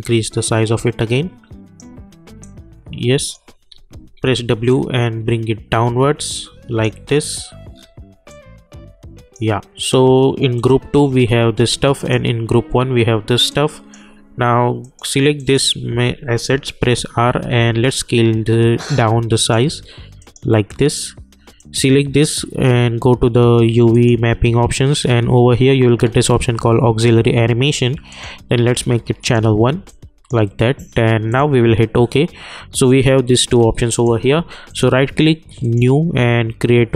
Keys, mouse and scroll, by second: 3.7 w, 4.7-7.2 drag, 7.2 scroll up 1, 7.3-8.3 scroll down 1, 8.3-14.8 drag, 16.8 r, 17.8-20.2 drag, 23.9 click, 25.0 scroll up 1, 28.1-31.3 drag, 33.9 click, 34.7 right click, 35.6 click.